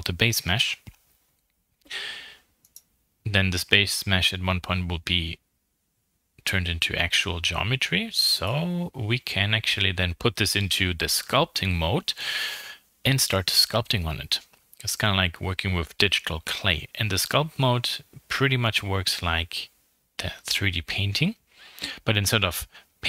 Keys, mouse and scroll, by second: 2.6 shift+middle click, 3.3 Tab, 3.6-4.1 scroll up 4, 4.1-5.1 scroll down 6, 4.4 1, 5.1 middle click, 5.7-6.1 scroll up 3, 6.5-7.2 scroll down 4, 6.7 middle click, 7.2 Tab, 7.5-7.9 scroll up 4, 8.4-9.6 shift+drag, 9.6 middle click, 10.0 shift+click, 10.3 middle click, 10.9 scroll up 1, 10.9-12.1 middle drag, 12.1 shift+click, 12.9 scroll down 2, 13.1 middle click, 13.7-14.7 scroll up 5, 14.1 middle click, 14.7-16.6 shift+middle drag, 16.6 m, 19.1 click, 19.9 middle click, 20.7 KP_1, 21.7-23.0 drag.